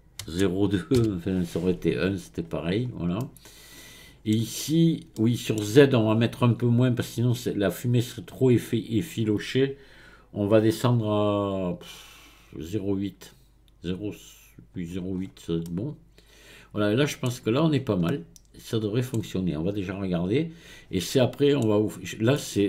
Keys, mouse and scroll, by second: 2.7-3.2 scroll down 1, 3.2-4.7 middle drag, 4.7-5.2 scroll up 4, 5.2-8.2 middle drag, 10.6-13.6 drag, 15.2-15.6 scroll down 3, 15.6-17.3 middle drag, 17.3-18.1 scroll down 7, 18.1-22.6 middle drag.